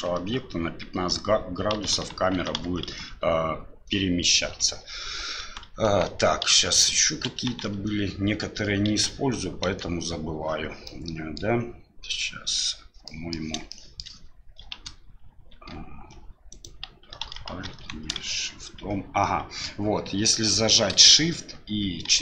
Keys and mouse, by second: 0.0-0.1 typing, 1.7 KP_4, 1.9-2.9 KP_4, 5.0 ctrl+KP_6, 5.4 ctrl+KP_6, 5.9 ctrl+KP_6, 6.4 ctrl+KP_4, 6.7 ctrl+KP_4, 7.4 ctrl+KP_9, 7.7 ctrl+KP_7, 8.9 ctrl+KP_1, 9.6 ctrl+KP_3, 10.8 click, 13.0 click, 13.7 shift+click, 13.9 shift+middle click, 17.2 alt+KP_4, 17.7 alt+KP_6, 18.3 shift+KP_4, 18.8 shift+KP_4, 21.7 shift+KP_4.